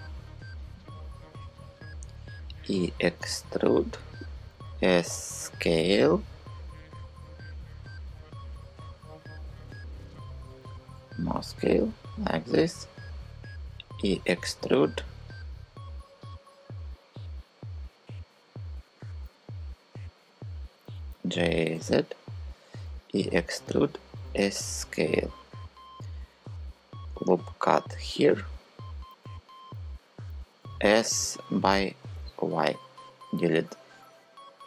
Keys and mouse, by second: 2.0 e, 4.2 s, 6.9 click, 10.1 s, 13.5 e, 20.8 g, 21.4 z, 22.6 e, 23.8 s, 26.6 click, 27.8-32.1 drag, 29.7 w, 30.2 s, 31.7 y.